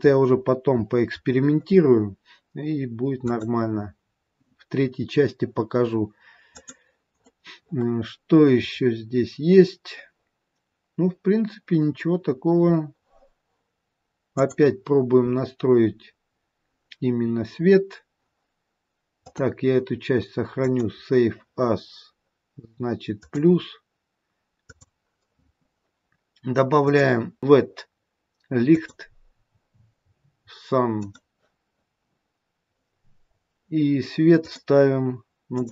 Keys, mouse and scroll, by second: 0.0-0.7 scroll up 6, 0.7-1.9 scroll up 2, 3.2 click, 3.2-4.0 scroll up 3, 6.5 click, 7.1-8.3 scroll up 6, 8.6-9.6 scroll up 6, 9.6-11.7 scroll up 4, 12.1-14.7 scroll down 2, 12.6-14.7 scroll up 1, 14.7 click, 19.2 click, 26.8 click, 32.1-33.9 scroll down 2, 34.5 click, 34.5-35.5 scroll down 2.